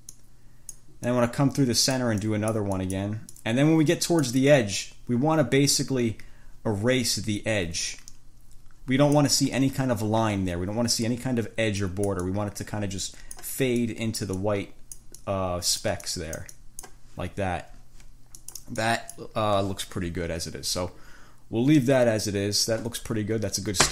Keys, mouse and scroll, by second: 0.4 click, 1.3-2.3 drag, 2.5 click, 3.5-9.6 drag, 12.1-13.9 drag, 14.1-15.4 drag, 18.7 click, 19.1 click.